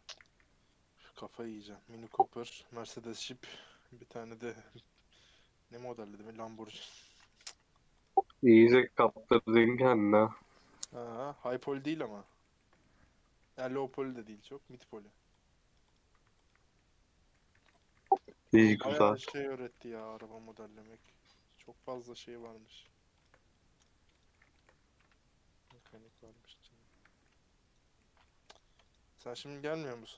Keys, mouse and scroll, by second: 1.5 x, 2.4 Left, 2.8 g, 3.7 click, 3.9 g, 4.7 click, 4.9 middle click, 5.7-6.3 scroll down 4, 5.9 middle click, 6.4 middle click, 6.8 scroll down 1, 7.0 middle click, 7.2-7.8 scroll up 6, 8.0 click, 9.1 right click, 9.3 middle click, 9.4 scroll up 4, 9.7 middle click, 9.9-10.4 scroll down 7, 10.4 shift+middle click, 10.5 shift+scroll up 1, 10.7 middle click, 11.3 scroll down 1, 11.4 middle click, 12.0 scroll up 3, 12.2-13.8 shift+middle drag, 13.8 alt+click, 15.9 right click, 16.4 alt+click, 16.7 middle click, 17.5 3, 17.6 click, 17.9 2, 19.5 right click, 19.7 shift+middle click, 20.2-20.6 scroll up 3, 20.6 middle click, 20.8 2, 21.0 middle click, 21.6 click, 21.8-23.2 middle drag, 23.2 shift+click, 23.4 right click, 23.9 scroll down 1, 24.1 middle click, 24.8 scroll down 1, 24.9-26.2 middle drag, 26.2-26.9 scroll up 3, 26.9-30.0 middle drag, 30.0 scroll down 3.